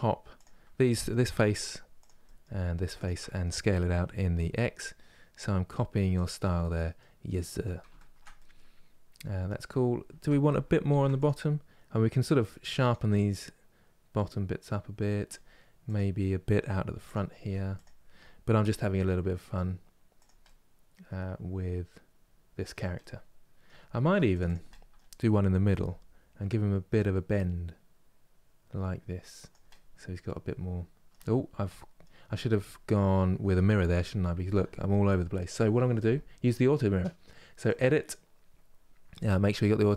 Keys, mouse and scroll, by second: 0.1 click, 0.5 middle click, 1.0 3, 1.7 click, 1.9 middle click, 2.7 shift+click, 2.9 middle click, 3.6 s, 6.2 middle click, 6.9 scroll up 2, 7.6-10.5 shift+middle drag, 10.5 ctrl+r, 12.8-15.6 middle drag, 15.6 click, 16.6 3, 17.5 click, 18.3 g, 20.1-23.7 middle drag, 23.7 ctrl+r, 24.4-25.4 middle drag, 25.4 g, 29.4-33.6 middle drag, 33.6 KP_1, 38.7 click.